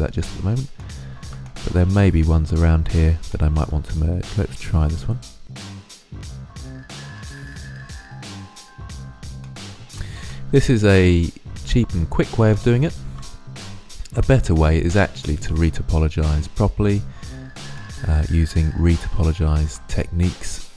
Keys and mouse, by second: 0.6-3.5 middle drag, 4.9 g, 5.9 middle click, 5.9 click, 6.0-7.2 middle drag, 7.2 middle click, 7.4 right click, 7.5 g, 7.7 click, 8.6 click, 9.3 click, 9.6 g, 9.8 click, 10.8 middle click, 11.1 right click, 11.3 g, 11.7 click, 12.5 ctrl+z, 13.8 right click, 14.2 right click, 14.4 g, 14.8 click, 15.0 middle click, 15.6 right click, 16.0 g, 18.4 g, 18.8 click, 19.3 right click, 19.5 g, 20.7 right click.